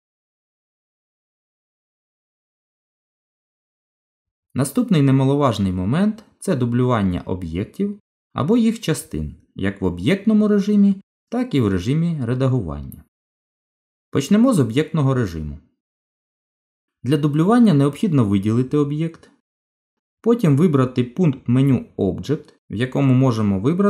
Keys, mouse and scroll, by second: 1.5-1.9 scroll down 1, 1.9 middle click, 5.0 shift+click, 7.2 Delete, 9.9 shift+a, 12.6 middle click, 14.6 click, 18.1 click, 23.5 click.